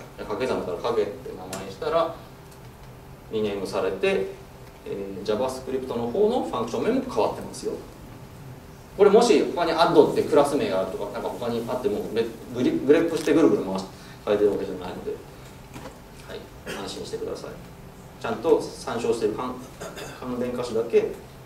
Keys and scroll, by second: 2.0 shift+F6.